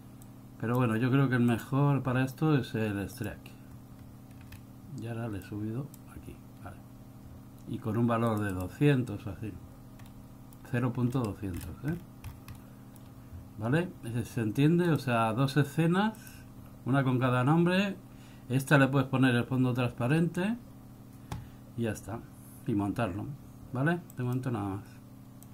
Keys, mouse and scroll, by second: 0.4 click, 1.7 click, 4.7-5.6 scroll down 1, 5.6 click, 8.4 click, 8.6 click, 10.2 middle click, 11.3-12.7 scroll down 16, 12.7 middle click, 13.3 scroll up 1, 14.9 click.